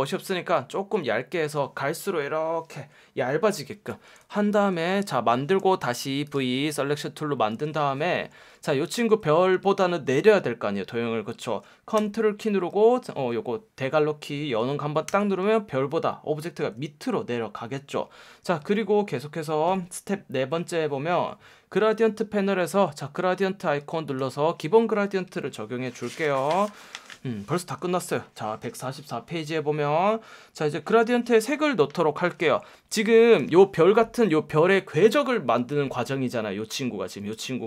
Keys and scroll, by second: 7.5 F1, 9.0 F1, 15.0 super+[, 22.7 F1, 23.8 F1.